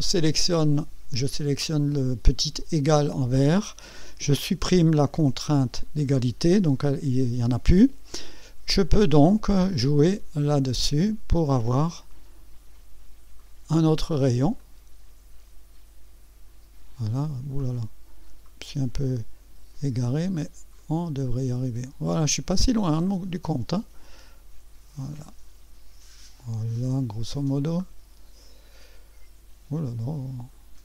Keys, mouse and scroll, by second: 6.0 Delete, 9.2 click, 14.6-16.7 drag, 17.6-19.9 drag, 20.8-22.4 drag, 23.3-24.4 drag, 25.1-30.7 drag.